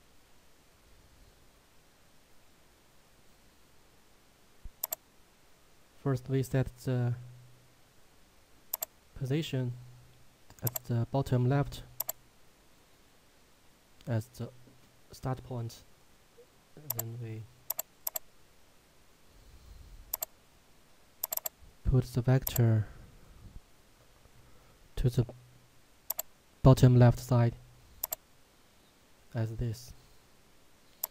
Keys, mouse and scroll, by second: 4.9 click, 8.7 click, 16.9 click, 24.1 Tab, 26.1 click, 29.7-30.5 scroll up 1, 30.5-31.1 scroll down 1.